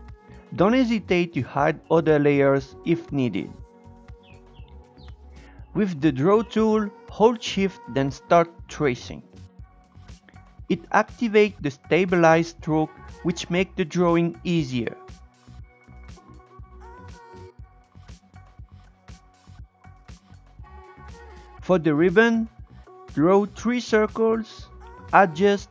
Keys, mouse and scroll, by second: 4.9-5.4 scroll up 1, 5.4 shift+middle click, 5.8-6.2 scroll up 2, 6.2-7.5 shift+middle drag, 7.5-8.8 scroll down 1, 8.8-9.7 scroll up 1, 9.7-11.1 shift+drag, 15.5 shift+middle click, 15.8-16.8 shift+drag, 16.8 shift+middle click, 17.0 scroll up 1, 17.7 shift+click, 21.0 click, 21.6 Tab, 21.8-22.8 drag, 22.8 Tab, 23.4 Tab, 23.7 Tab, 23.8-25.6 drag, 25.6 Tab.